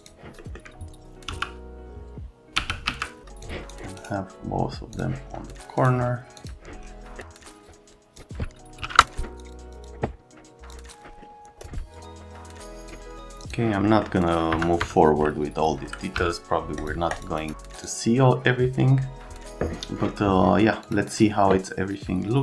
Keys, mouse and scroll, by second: 0.0 click, 0.4 right click, 1.3 d, 2.6 f, 2.9 z, 3.4 click, 4.0 right click, 4.9 click, 5.8 click, 6.4 click, 7.6 click, 7.9 click, 8.3 click, 8.5-9.3 typing, 9.3 click, 9.7 click, 9.8 click, 10.9 click, 11.0 click, 11.2 right click, 11.4 click, 11.9 click, 12.6 click, 13.1 click, 13.4 click, 13.8 right click, 14.5 F3, 14.8 F3, 16.2 x, 16.8 click, 17.1 click, 17.4 scroll down 1, 17.7 click, 20.8 click.